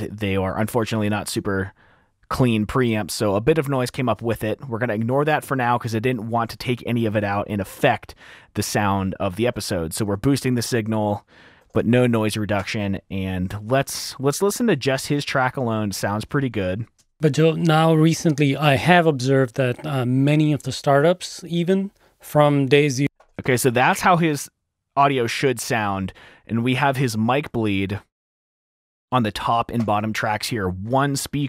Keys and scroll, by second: 4.5 F7, 4.8 r, 9.9 t, 13.0 F7, 15.6 s, 17.8 space, 20.8 t, 21.6 t, 22.7-23.6 typing.